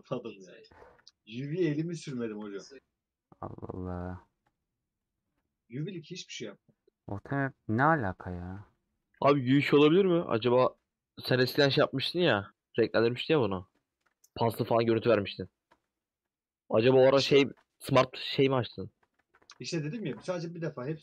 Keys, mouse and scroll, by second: 2.3 KP_Decimal, 2.8-3.5 scroll down 10, 3.6 middle click, 4.5 click, 5.2 click, 5.8 h, 6.0-7.1 drag, 8.2-8.8 scroll down 5, 8.8 h, 8.9 click, 11.1 h, 12.3 click, 13.5 h, 13.7 middle click, 14.2 scroll down 2, 15.2 click, 18.0 scroll down 2, 19.1 alt+h, 20.2 middle click.